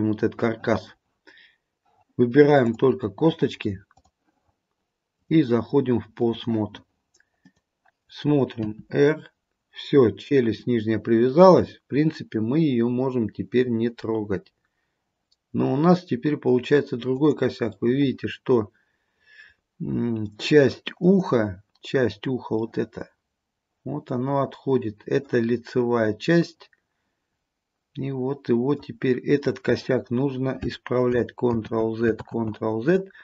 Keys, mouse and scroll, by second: 2.7 click, 4.0 click, 5.3 click, 7.5 click, 8.8 r, 17.9 middle click, 18.6 middle click, 19.3 middle click, 20.0 middle click, 21.1 click, 22.7 middle click, 22.8 middle click, 25.9 middle click, 29.2-31.2 scroll down 2, 31.6 ctrl+z, 32.3 ctrl+z.